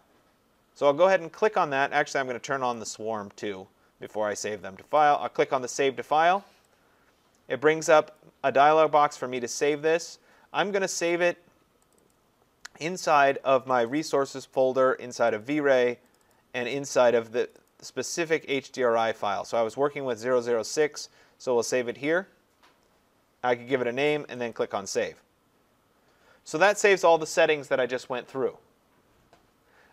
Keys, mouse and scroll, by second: 2.9 click, 5.2 click, 8.2 click, 9.8 click, 9.9 click, 11.9 click, 12.1 click, 13.8 click, 14.0 click, 15.2 click, 15.4 click, 16.1 click, 16.3 click, 17.5 click, 17.7 click, 20.8 click, 21.0 click, 24.6 click.